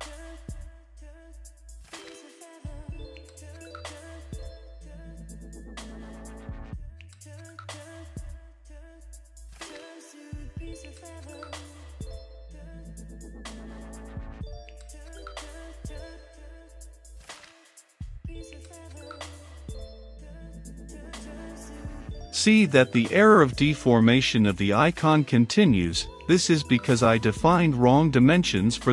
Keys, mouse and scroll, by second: 0.0-0.2 typing, 1.8 click, 8.6 middle click, 8.9-10.3 drag, 8.9 middle click, 10.3 Return, 10.3 middle click, 10.5-12.1 typing, 11.1 Return, 13.4 click, 13.9 Return, 14.0-15.8 typing, 14.7 Return, 16.8 ctrl+s, 18.2-20.2 drag, 20.2-21.4 middle drag, 21.4-28.9 drag.